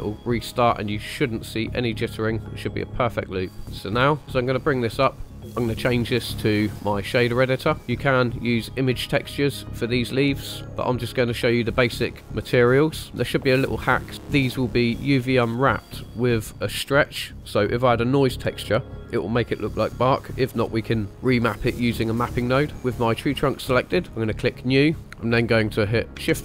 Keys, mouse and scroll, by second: 3.8 click, 4.7 scroll down 1, 5.1 shift+middle click, 5.3-7.4 drag, 7.8 scroll up 1, 8.1-8.5 shift+middle drag, 8.8 scroll up 2, 10.7 scroll down 2, 11.3-12.1 shift+middle drag, 13.1 scroll up 2, 22.7 click, 24.2 click, 25.0 scroll up 1, 25.0 n, 26.2 shift+a.